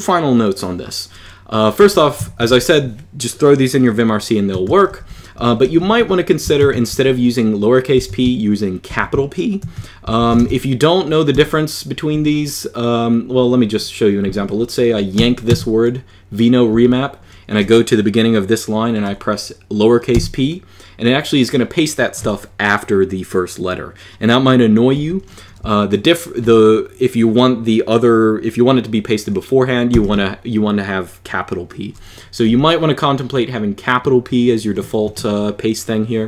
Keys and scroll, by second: 1.3-2.8 typing, 4.4 Escape, 4.4-6.4 typing, 8.7-12.6 typing, 15.0 y, 15.2 w, 16.5 j, 19.9 p, 24.7 u, 29.7 shift+p, 32.3 u.